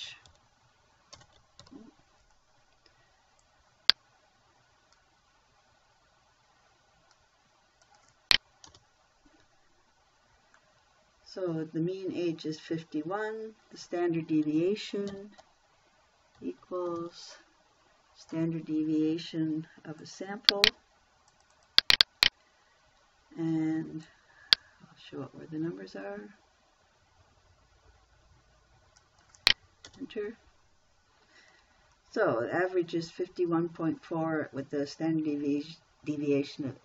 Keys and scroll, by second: 0.0-2.1 typing, 9.1 Return, 10.1 Return, 15.5 =, 16.8 s, 17.3 t, 30.3 Return.